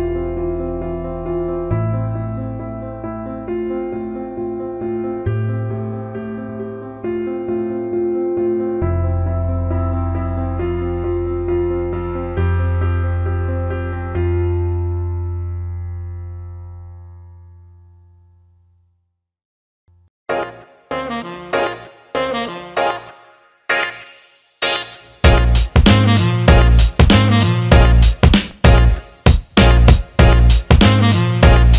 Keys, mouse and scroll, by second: 0.0 click, 0.4 alt+middle click, 1.0 click, 4.5 alt+middle click, 5.3 ctrl+alt+middle click, 5.7 alt+shift+middle click, 7.5-9.0 alt+shift+middle drag, 10.9 click, 12.3-13.9 drag, 14.5 click, 17.5 click, 18.5 alt+middle click, 20.2 right click, 22.8 click, 23.9 click, 25.1 click, 28.4 click, 28.9 click, 30.3 click.